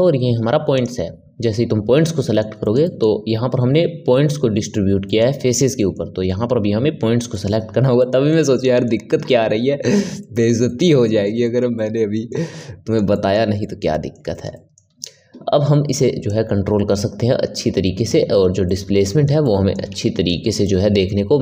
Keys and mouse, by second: 2.1-16.2 middle drag, 16.2-18.6 drag, 18.6-21.4 middle drag.